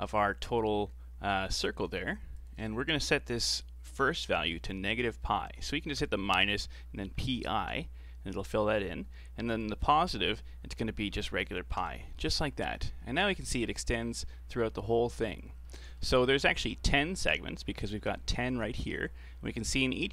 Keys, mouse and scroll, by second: 2.4-5.4 drag, 9.5-12.6 drag, 15.7 middle click, 16.2-18.5 scroll up 3, 19.3-19.7 scroll up 1, 19.7-20.1 scroll down 3.